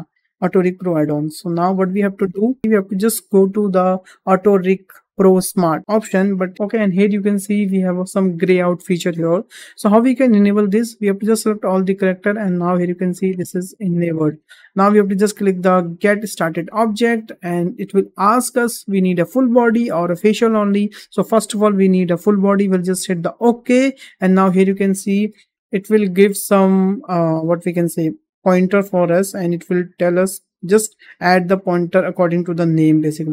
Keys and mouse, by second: 4.2 click, 11.2 click, 16.6-23.4 drag, 25.4 shift+middle drag, 26.2 shift+middle drag.